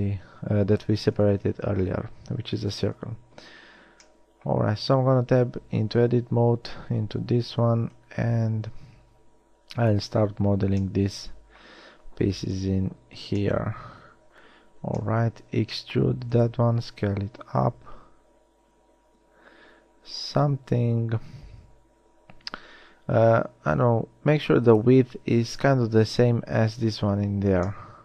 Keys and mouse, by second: 0.4 g, 3.1 KP_1, 5.9 Tab, 7.7 z, 12.6 KP_3, 15.8 e, 17.0 s.